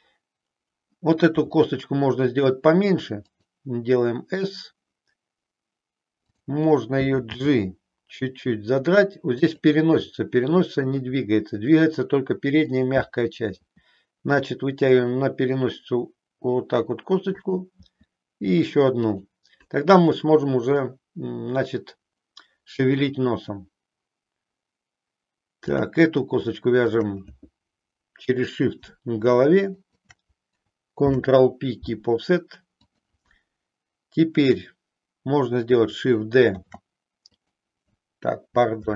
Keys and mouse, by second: 1.3 s, 3.2 click, 6.2 click, 7.3 g, 13.7 e, 17.9 e, 25.8 click, 26.9 click, 29.7 shift+click, 30.9 ctrl+p, 36.6 shift+d, 37.4 click.